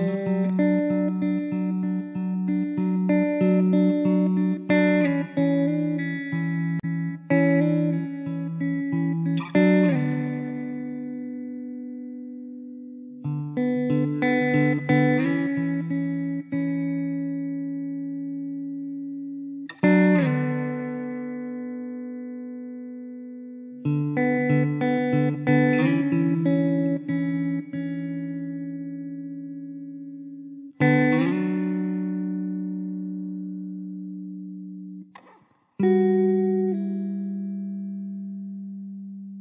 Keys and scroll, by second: 3.2 Tab, 6.9 alt+z, 8.1 Tab, 10.2 Tab, 10.4 alt+z, 10.8 Tab, 12.9 Tab, 13.7 Tab, 13.9 alt+z, 16.4 shift+d, 20.9 s, 23.7 ctrl+z, 23.8 ctrl+z, 24.1 ctrl+z, 24.2 Tab, 25.1 Tab, 26.5 ctrl+z, 27.9 Tab, 28.2 3, 28.6 `, 29.0 alt+z, 29.4 3, 31.3 ctrl+z, 33.7 alt+z, 35.4 alt+z, 37.7 l, 38.5 Tab, 39.0 Tab.